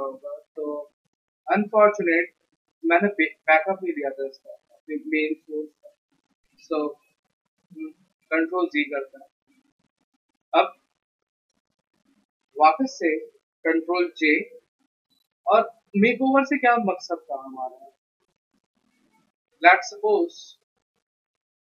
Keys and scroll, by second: 9.0 ctrl+z, 14.2 ctrl+j.